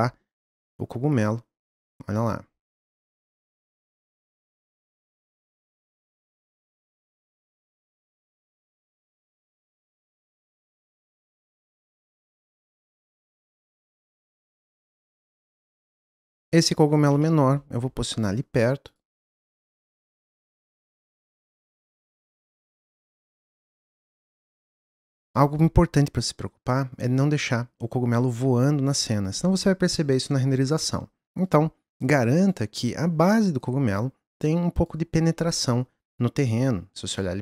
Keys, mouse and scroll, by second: 3.4 middle click, 4.0 click, 4.6 click, 5.8 click, 6.2 click, 7.4 click, 9.1 s, 10.5 click, 11.8 click, 12.7 g, 15.3 drag, 15.5 drag, 15.7-18.9 middle drag, 18.9-20.2 drag, 22.0 click, 22.3-23.3 middle drag, 23.3 click, 24.6 click, 28.3-31.4 middle drag, 31.4 click, 33.6 click, 37.2-37.4 middle drag.